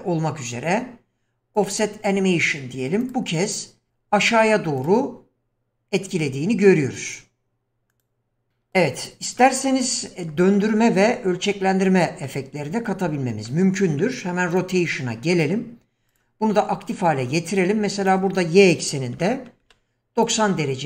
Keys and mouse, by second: 3.1 click, 3.9 click, 4.8 click, 7.9 click, 8.5 middle drag, 9.4-9.7 middle drag, 10.4 middle click, 12.2-12.9 middle drag, 13.5 middle click, 14.5 click, 16.1 drag, 18.0-20.3 drag.